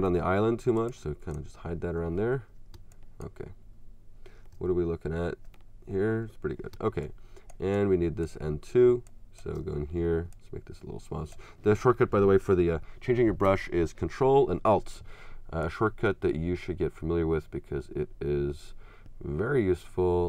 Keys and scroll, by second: 0.1 x, 1.9 x, 2.8 space, 6.7 space.